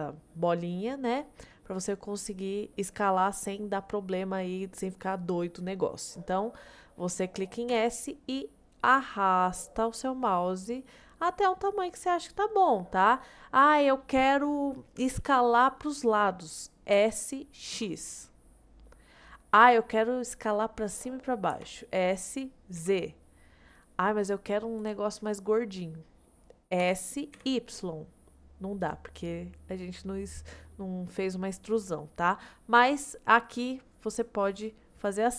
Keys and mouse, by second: 7.7 s, 17.0 s, 17.8 x, 21.6 s, 22.8 z, 25.6-26.1 middle drag, 26.8 s, 27.4 y, 29.2 middle drag, 29.4 click, 30.7 drag, 31.9 drag.